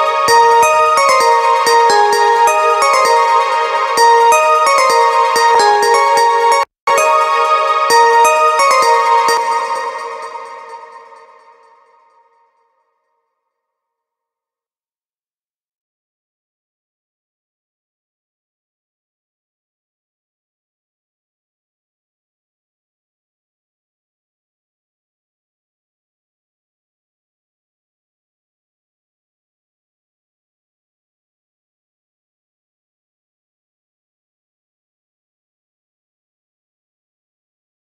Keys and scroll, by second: 8.8 space, 20.8 space, 23.5 space, 32.5 space, 34.3 space.